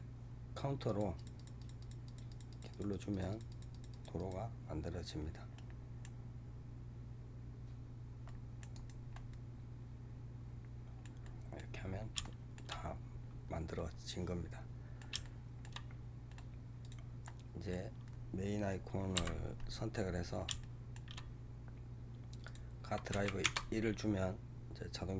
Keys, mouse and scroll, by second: 0.7-4.0 drag, 4.1-7.1 drag, 9.0-11.7 middle drag, 11.7-12.1 scroll up 3, 12.1 shift+middle click, 12.6-13.6 scroll up 8, 13.6-15.8 middle drag, 15.8-16.3 scroll up 5, 16.2 middle click, 16.7 click, 17.1-19.0 middle drag, 19.0 KP_Decimal, 20.0-20.5 scroll down 2, 20.5-22.3 shift+middle drag, 22.3-25.1 drag.